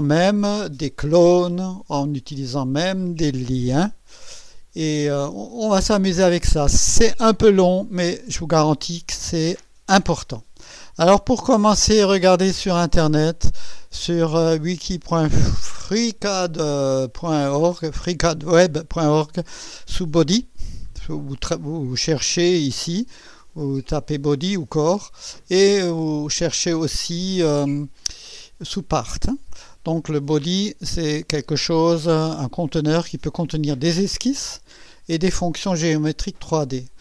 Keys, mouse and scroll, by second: 9.0 scroll up 2, 9.6 scroll up 1, 9.7 middle click, 9.7 scroll down 2, 12.9 click, 27.5 click, 28.1 click, 30.1 click.